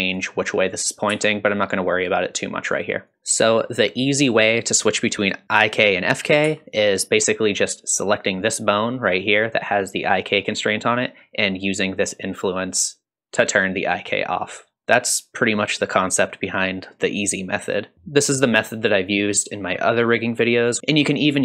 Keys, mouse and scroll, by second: 1.1 g, 3.1 click, 4.5 click, 6.4 g, 8.1 click, 12.2-14.0 drag, 18.7-20.8 drag, 20.8-21.4 drag.